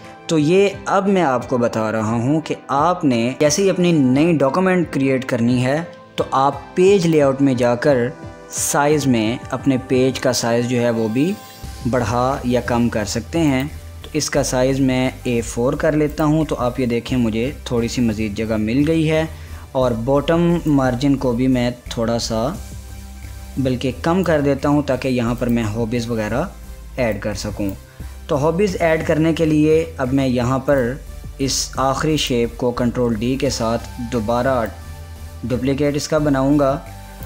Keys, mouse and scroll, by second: 0.0 scroll up 1, 1.3 scroll down 1, 7.7 click, 15.1 scroll down 1, 16.8 click, 21.4-30.6 drag, 31.5 click, 33.7 ctrl+d, 35.3-37.2 drag.